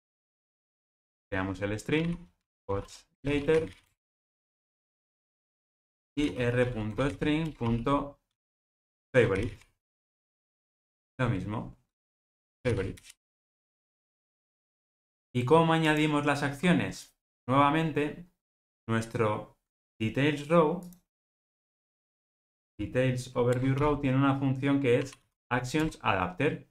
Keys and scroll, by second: 0.3 alt+Return, 7.4 Return, 10.3 Return, 23.5 Return.